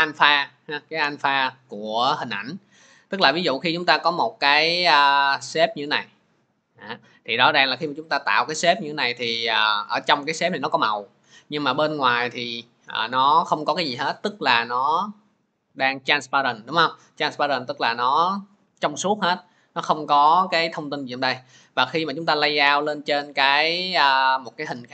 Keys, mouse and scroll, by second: 5.7-24.9 drag.